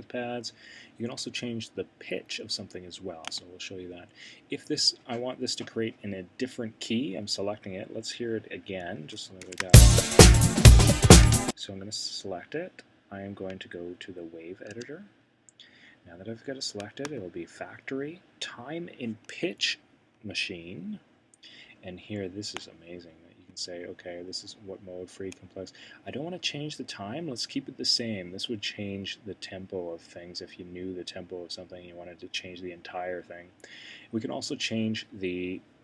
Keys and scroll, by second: 9.4 c, 10.3 c, 14.7 w.